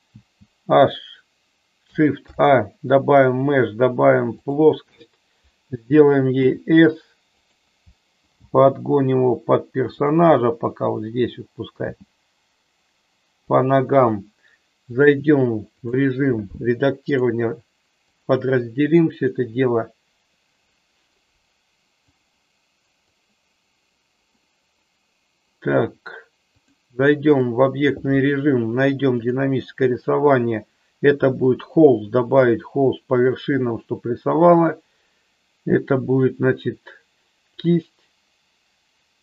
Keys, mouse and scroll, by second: 0.3 h, 2.1 shift+a, 6.4 s, 7.5 click, 8.3 g, 10.2 click, 13.6 click, 15.0 click, 17.1-18.4 right drag, 19.4-20.7 drag, 21.1-22.4 right drag, 23.0-24.1 drag, 26.6 click, 29.2 click, 31.9 click, 37.6-39.2 drag.